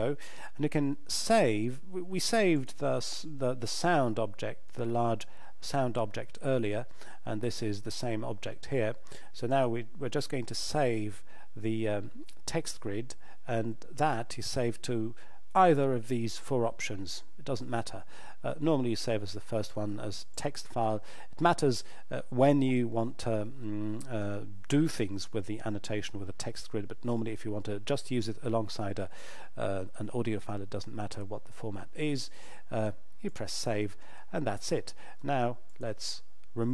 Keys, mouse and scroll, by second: 9.5 click, 14.0 click, 20.3 click, 33.8 click, 35.7 shift+click.